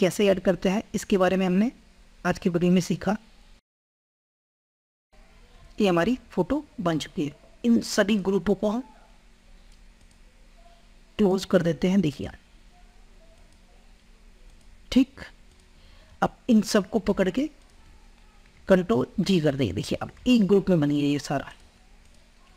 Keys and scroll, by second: 18.7 ctrl+g.